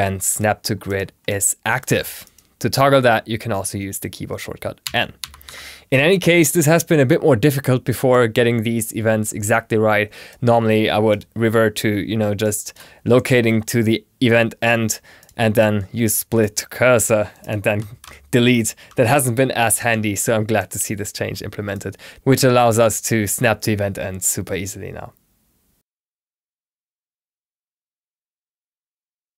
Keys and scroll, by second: 4.7 n.